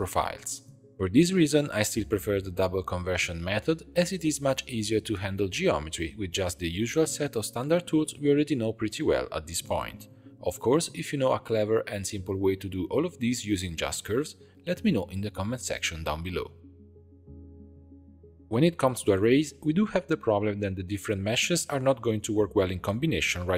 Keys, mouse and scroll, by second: 1.2 click, 1.5 g, 2.8 Tab, 3.0-3.3 scroll down 2, 3.3-6.1 middle drag, 6.1 2, 6.2 alt+click, 6.7 s, 8.0 s, 9.5 g, 9.6 Tab, 10.2-11.9 drag, 12.5 click, 12.6 middle click, 12.6 ctrl+a, 13.0-14.3 drag, 14.6 click, 15.3 Tab, 15.7-16.7 shift+middle drag, 16.7 click, 17.3 click, 17.7 Tab, 17.9 shift+middle click, 18.6 click, 19.8-21.9 drag, 23.0-23.5 drag.